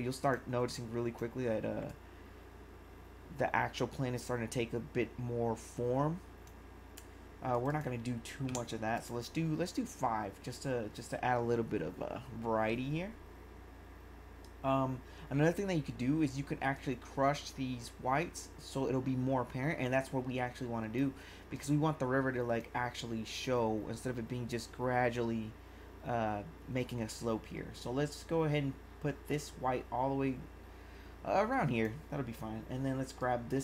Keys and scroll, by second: 8.5 5.